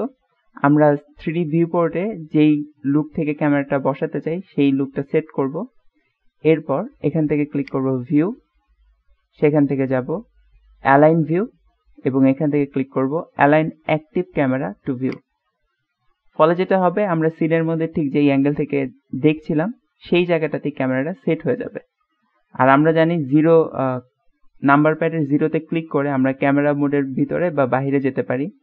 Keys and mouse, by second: 1.2-2.2 middle drag, 3.4-4.8 middle drag, 5.4 middle click, 7.7-15.4 drag, 22.5 middle click, 23.4 KP_0, 26.0 KP_0, 26.9-27.5 middle drag, 27.8 KP_0.